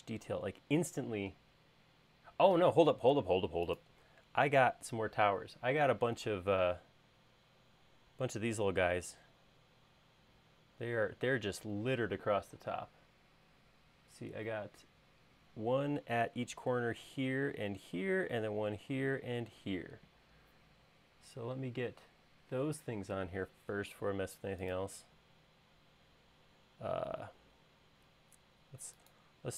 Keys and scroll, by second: 2.8 space.